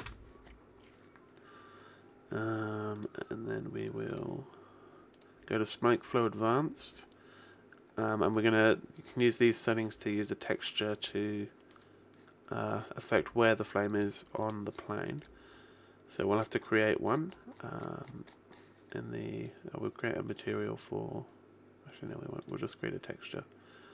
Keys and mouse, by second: 0.6-2.7 middle drag, 3.1-5.1 right drag, 5.1 click, 6.9 middle click, 9.9 middle click, 10.2 click, 12.3-15.2 middle drag, 15.2 click.